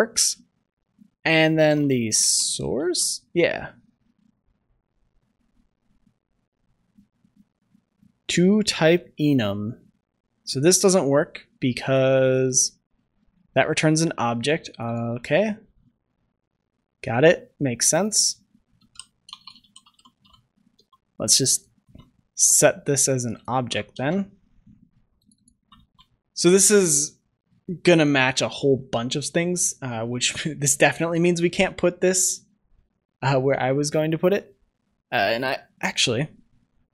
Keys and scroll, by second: 2.7 ctrl+s, 20.7 ctrl+s, 22.1 ctrl+c, 23.5 ctrl+v, 23.8 ctrl+s, 25.5 ctrl+v, 26.8 ctrl+s.